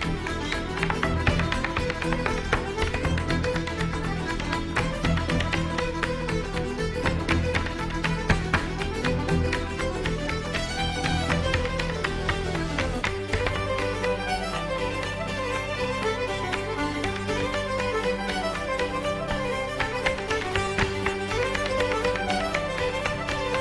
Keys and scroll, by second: 1.2 alt+BackSpace.